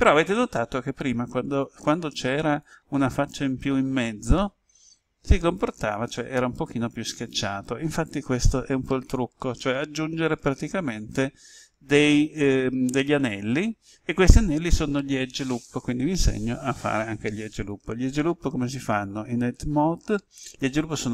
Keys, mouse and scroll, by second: 8.6 ctrl+z.